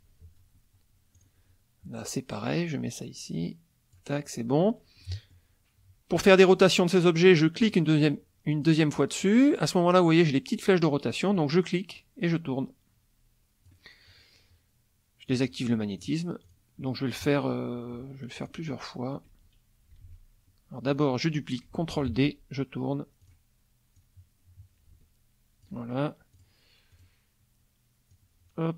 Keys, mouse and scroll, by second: 1.1 click, 2.0-4.1 drag, 5.0 middle click, 7.6 click, 8.5 click, 11.3-13.8 drag, 15.3 click, 15.7 middle click, 16.4 click, 17.2 KP_Subtract, 18.4 click, 20.0 ctrl+z, 20.8 click, 21.9 ctrl+d, 23.2 click, 23.9-25.8 drag, 26.3 click, 26.9 click, 28.1-28.7 drag.